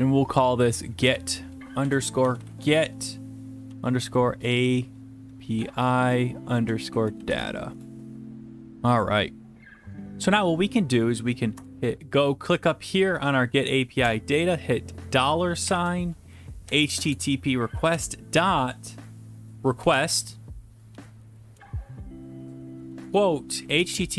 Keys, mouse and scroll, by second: 0.9 click, 1.8 click, 1.8-7.4 typing, 7.7 Return, 9.9 click, 11.5 Return, 12.6 click, 14.0 Return, 15.6-18.4 typing, 19.7-21.5 typing, 21.6 Tab, 22.9-24.1 typing.